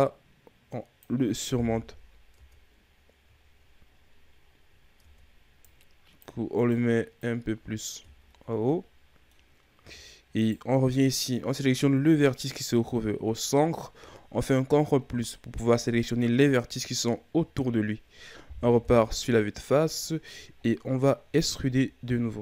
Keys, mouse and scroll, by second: 1.5 KP_1, 2.3 Tab, 2.7-3.4 scroll down 4, 3.4-5.0 shift+scroll up 8, 5.0 Tab, 5.6 click, 6.5 right click, 7.1 click, 8.0 Tab, 8.3-8.7 scroll down 1, 8.7-9.4 middle drag, 9.4-9.8 scroll up 2, 9.8 Tab, 10.3 right click, 10.9-14.0 middle drag, 14.7 ctrl+KP_Add, 18.7 KP_1, 19.7-21.5 scroll down 7, 21.5 e.